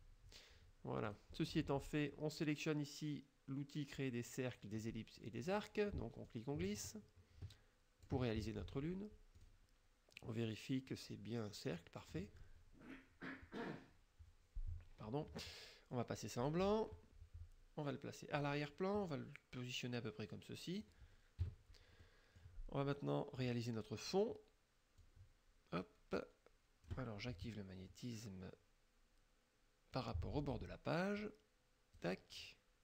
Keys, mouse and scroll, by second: 1.1 click, 5.5 click, 6.3-8.3 drag, 9.4 click, 16.5 click, 18.5 click, 19.1-21.1 drag, 21.5 KP_Subtract, 22.1 click, 23.5 click, 25.1-27.1 drag, 30.0 click, 31.3 click.